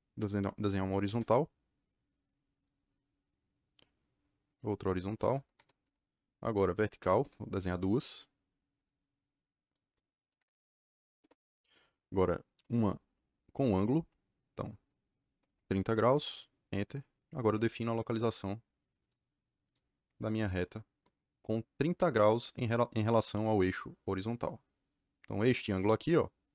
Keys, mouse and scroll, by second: 1.0 h, 2.5 click, 4.8 click, 5.5 Return, 5.7 Return, 6.9 v, 7.1 KP_Enter, 8.7 click, 9.6 click, 10.3 KP_Enter, 11.1 KP_Enter, 12.5 a, 13.5 KP_Enter, 15.3 KP_3, 15.4 KP_0, 16.0 KP_Enter, 18.9 click, 19.6 click, 20.2 click, 23.2 KP_Enter.